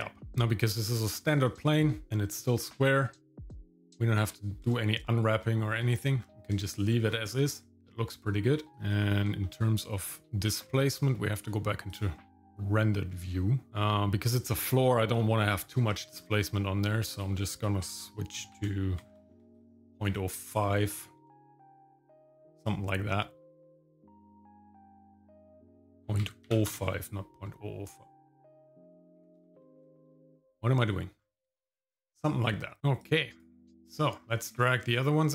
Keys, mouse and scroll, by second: 0.3 shift+middle click, 1.6 shift+middle click, 4.2 scroll up 2, 4.8 shift+middle click, 5.4 shift+middle click, 6.2-6.5 scroll down 1, 6.6 shift+middle click, 7.0 scroll up 1, 8.7 middle click, 8.7-9.2 scroll down 2, 9.4-10.6 shift+middle drag, 12.1 click, 12.4 middle click, 13.3 shift+middle click, 15.5-16.3 scroll up 5, 17.1-19.6 drag, 19.2 KP_0, 21.3 shift+middle click, 22.5 scroll up 2, 25.1-26.7 drag, 28.5-29.8 drag, 31.2 scroll down 1, 31.5-32.8 shift+middle drag, 32.8 scroll down 3, 33.0 click, 33.9 shift+middle click, 34.2 scroll up 2, 34.5 shift+middle click, 34.9 middle click.